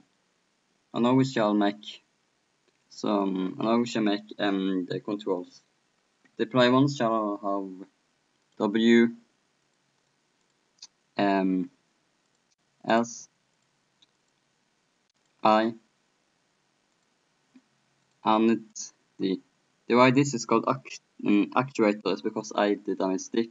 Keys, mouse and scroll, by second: 1.3-2.9 right drag, 2.9 middle click, 3.3-5.0 drag, 8.4-16.9 drag, 12.2 middle click, 20.3-23.5 middle drag.